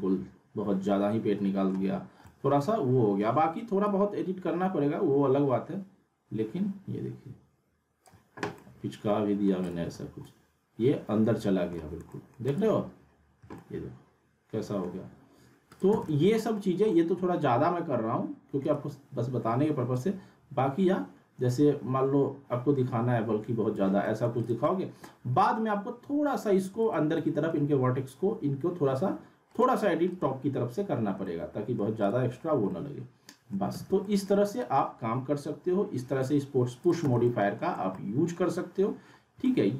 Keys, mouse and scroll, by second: 3.9-5.4 drag, 8.6-9.5 alt+middle click, 9.8 click, 10.2-11.8 alt+middle drag, 11.9 scroll down 1, 12.1 alt+middle click, 12.4 click, 12.6 click, 13.5 middle click, 13.7-15.1 alt+middle click, 14.8 scroll down 1, 15.6 scroll up 1, 15.7 click, 15.9 z, 16.1 alt+middle click, 16.6 scroll up 1, 16.9 alt+middle click, 18.6 right click, 19.9-24.0 drag, 24.0 alt+scroll up 1, 24.4 click, 24.6 alt+middle click, 25.4 click, 26.8 click, 27.1-27.8 alt+middle drag, 29.6 click, 31.2-31.9 alt+middle click, 32.0 click, 32.7-33.6 alt+middle click, 33.7 z, 34.0 alt+middle click, 34.8 click, 37.2 z, 37.2 alt+middle click, 37.8 scroll down 1, 38.2-38.5 alt+middle drag, 39.2 scroll up 1, 39.4-39.7 alt+middle click.